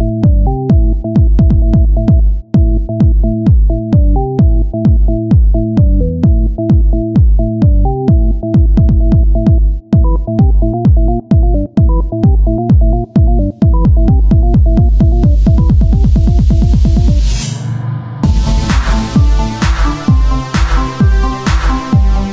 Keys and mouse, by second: 1.5-4.7 right drag, 2.5 r, 6.7-7.9 right drag, 6.9 Tab, 8.3 z, 9.3 z, 10.2 Tab, 13.1 Tab, 14.4 Tab, 14.4 Tab, 18.7 Tab, 21.7 Tab, 22.2 ctrl+Tab.